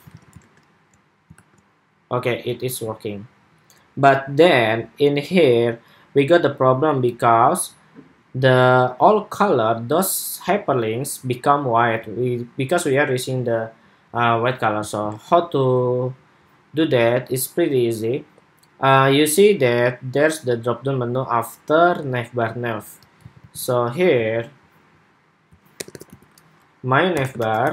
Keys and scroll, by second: 0.2 super+Tab, 1.2 super+r, 14.9 super+Tab, 22.9 super+c, 23.1 super+c.